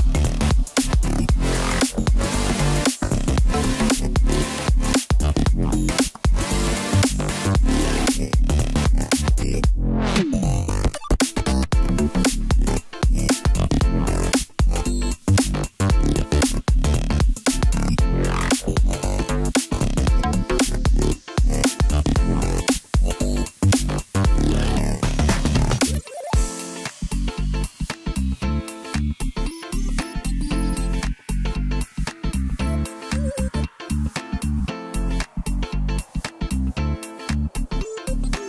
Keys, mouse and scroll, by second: 0.3 s, 2.5 s, 5.2 s, 7.2 KP_3, 8.0-9.1 scroll up 1, 9.1 g, 12.0-13.3 scroll up 1, 13.6 g, 16.0 s, 18.4 g, 21.7-23.9 middle drag, 23.9 KP_7, 25.1 s, 28.5 s, 31.3-31.6 scroll down 1, 31.6-32.6 middle drag, 32.6 scroll up 1, 32.8 middle click, 33.7 KP_7, 34.6 scroll up 1, 36.3 Tab, 38.1 ctrl+r.